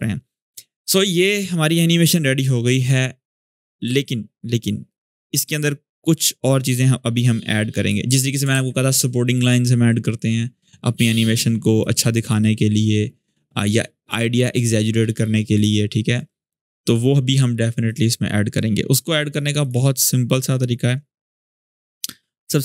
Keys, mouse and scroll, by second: 3.0-5.3 drag, 6.4 click, 8.3 ctrl+s, 11.5-12.2 drag.